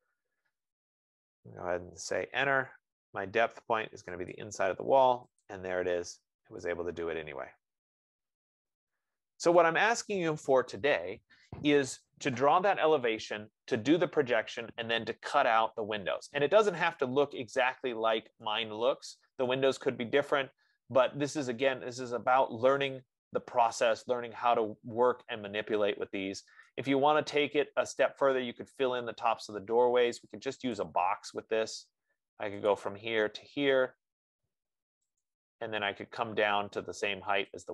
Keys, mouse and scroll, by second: 2.6 Return, 4.7 click, 5.8 click, 6.4-7.1 scroll, 9.9 right click, 19.8-24.8 right drag, 27.2 right click, 28.1 middle click, 31.2 click, 33.0 click.